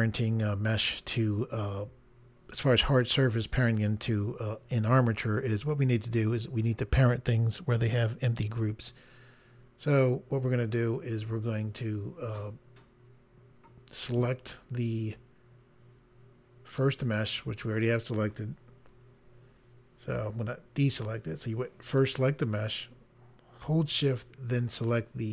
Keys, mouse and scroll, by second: 20.9 click, 22.0 click.